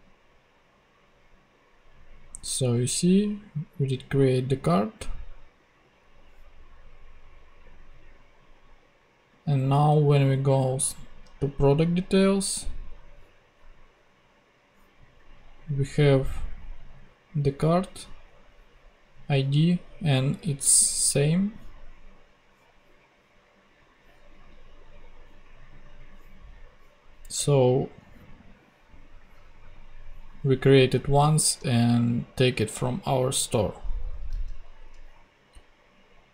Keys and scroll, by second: 34.3 super+x.